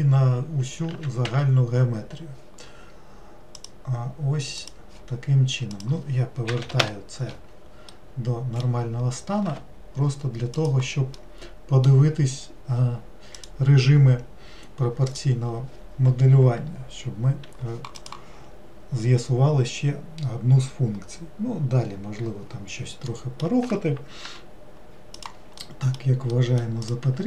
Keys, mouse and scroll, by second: 3.6-7.9 drag, 7.9-10.6 middle drag, 10.6-11.2 drag, 11.2-13.4 middle drag, 13.4-15.2 drag, 23.1-24.3 middle drag, 24.3 g, 25.6-26.9 middle drag, 26.9 click.